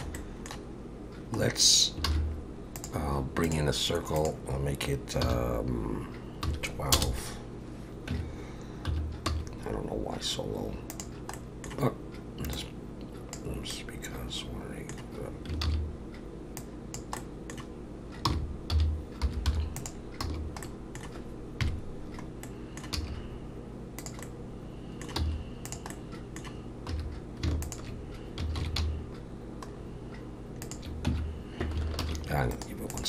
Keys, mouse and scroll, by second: 0.2 middle click, 1.5-2.0 scroll down 2, 2.1 shift+a, 4.2 click, 8.1 Tab, 8.9 1, 9.3 s, 11.3 middle click, 12.6 click, 13.7 middle click, 15.6 ctrl+z, 16.6 click, 17.2 middle click, 18.3 r, 20.2 f, 20.6 middle click, 21.6 KP_Decimal, 22.4 middle click, 22.9 e, 24.2 middle click, 25.2 x, 25.9 middle click, 26.9 2, 27.6 alt+shift+click, 28.6 ctrl+b, 31.1 Tab, 32.0 ctrl+1, 32.5 right click.